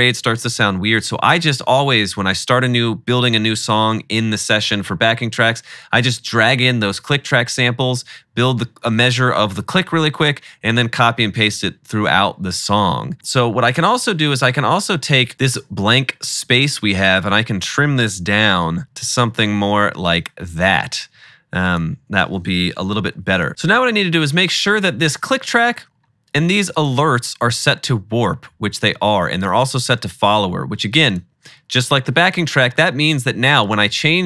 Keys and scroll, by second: 15.3 shift+-, 18.5 =, 18.8 =, 22.9 -, 23.2 -.